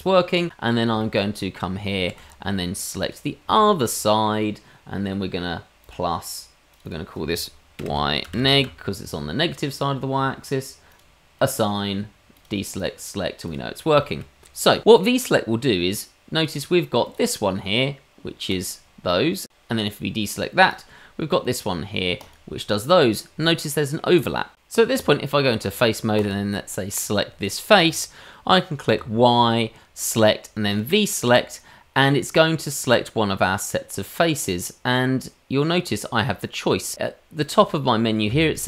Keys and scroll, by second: 2.0 shift+z, 3.4 shift+z, 24.9 Tab, 28.9 y.